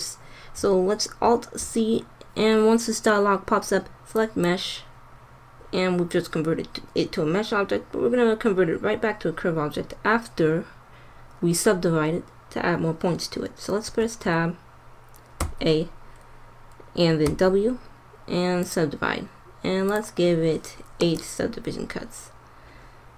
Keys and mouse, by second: 1.1 alt+c, 13.9 Tab, 15.4 a, 17.1 w, 19.8-21.5 drag.